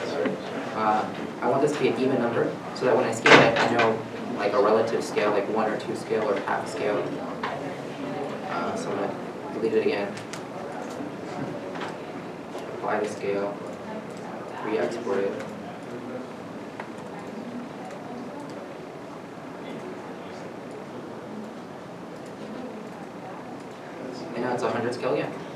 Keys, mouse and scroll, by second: 2.5 right click, 7.2 middle click, 8.6 alt+Tab, 10.1 Delete, 11.2 alt+Tab, 11.9 alt+Tab, 12.9 ctrl+a, 13.9 click, 14.8 click, 18.5 ctrl+a.